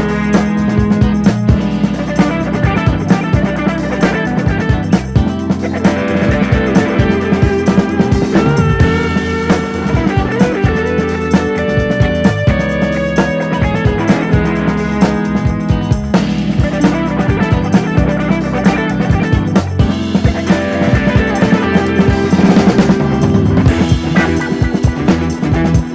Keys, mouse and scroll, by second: 0.4 shift+d, 3.7 scroll down 2, 3.9-4.2 middle drag, 4.2 scroll up 1, 4.3-5.0 middle drag, 5.0 click, 6.1 click, 6.3 scroll down 2, 6.4-7.2 middle drag, 7.2 click, 7.6 KP_7, 8.2 shift+d, 10.8 g, 11.5 middle click, 11.8 click, 11.9 scroll up 2, 12.0-12.6 middle drag, 12.6-13.0 drag, 13.9-14.3 drag, 14.4 scroll down 1, 14.5 middle drag, 14.8 click, 14.9-16.1 middle drag, 16.1 ctrl+s, 17.0 click, 17.4 KP_3, 17.6-18.0 scroll up 5, 18.0-18.5 shift+middle drag, 18.5 Tab, 18.8 click, 19.3 l, 19.8 shift+d, 22.1 KP_7, 22.5 alt+/, 22.7 scroll up 2, 23.0 shift+middle click, 23.4-23.7 scroll up 1, 23.7 alt+/, 24.4 click, 25.8 scroll down 1.